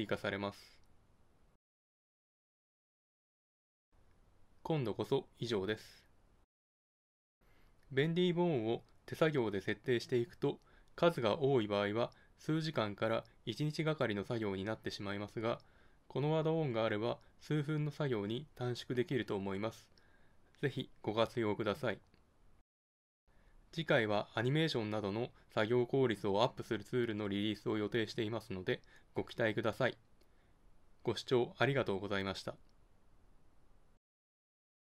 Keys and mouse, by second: 1.2 g, 2.6 right click, 2.9 g, 4.2 right click, 4.6 g, 6.1 g.